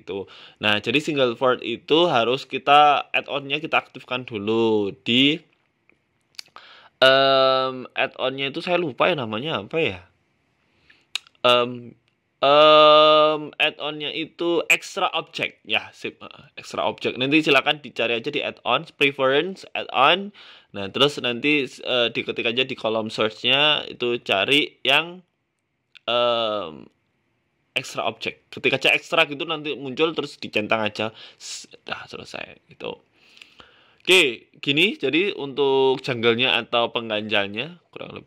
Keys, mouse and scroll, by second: 2.3 middle click, 3.1 Tab, 3.6 g, 5.2 Tab, 5.5 ctrl+a, 7.7 click, 8.1 middle click, 9.8 middle click, 12.5 click, 12.7 middle click, 14.0 click, 14.3 ctrl+a, 15.1 click, 15.5 Tab, 16.3 ctrl+a, 16.8 middle click, 17.5 middle click, 17.9 ctrl+z, 20.2 middle click, 20.4 middle click, 20.7 Tab, 21.0 middle click, 22.0 middle click, 22.4 KP_7, 23.1 click, 23.6 shift+middle click, 24.2 shift+d, 25.3 middle click, 26.3 KP_7, 27.1 g, 28.5 middle click, 29.7 KP_7, 30.2 f, 31.0 g, 31.7 middle click, 33.8 KP_7, 34.4 z, 35.6 g, 36.7 middle click, 37.7 KP_7.